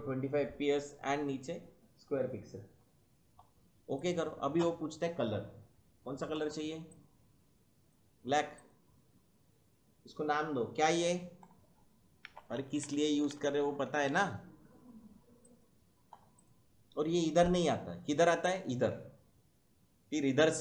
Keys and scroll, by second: 12.0-14.6 typing.